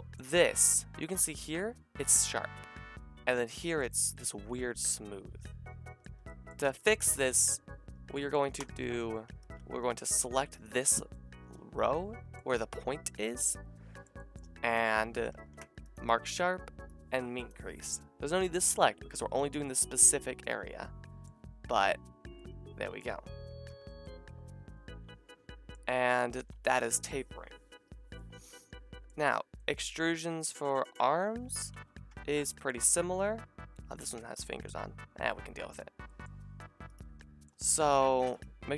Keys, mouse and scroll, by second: 6.7 click, 8.6 Tab, 9.4 a, 12.4-14.0 middle drag, 14.4 middle click, 15.3 ctrl+e, 15.6-17.0 middle drag, 18.5-26.7 drag, 23.2 a, 23.7 Tab, 30.4 click, 30.4 middle click, 30.4 right click, 30.8 click, 30.8 middle click, 30.8 right click, 32.1 Tab, 32.8 a, 34.2 Tab, 35.2 Tab, 36.9 alt+shift+click, 37.8 g.